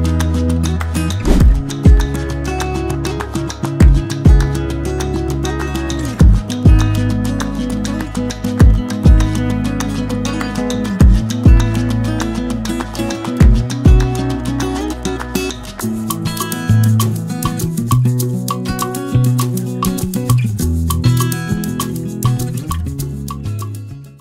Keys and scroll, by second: 6.9-9.1 typing, 7.4 Caps_Lock, 9.4 ctrl+s.